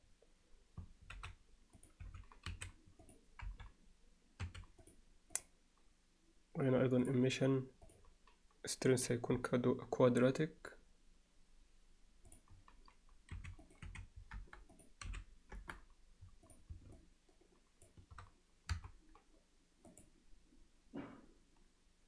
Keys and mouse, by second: 1.2-4.4 typing, 1.8 click, 5.4-7.1 drag, 7.9-12.4 drag, 13.7 click, 14.7-15.8 drag, 18.7 KP_0.